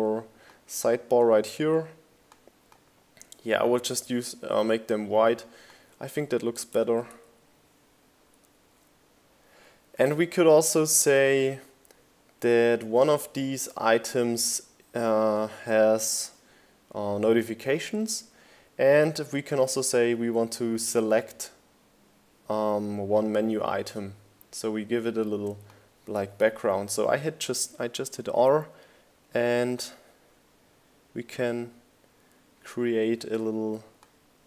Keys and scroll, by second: 0.1 Right, 17.9 r.